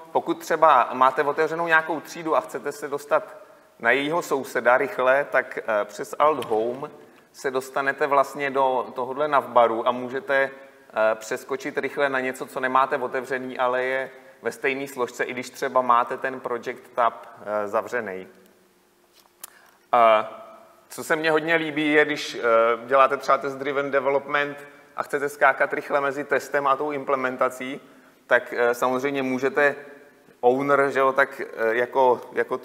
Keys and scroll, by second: 7.0 alt+Home.